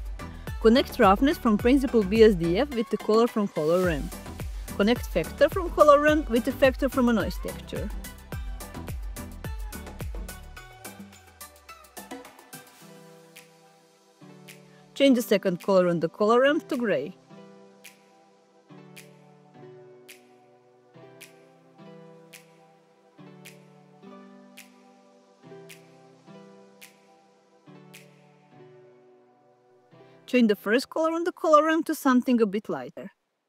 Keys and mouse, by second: 1.5 click, 4.6 click, 6.7 click, 13.2 click, 14.2 middle click, 15.9 click, 16.6 click, 32.7 click.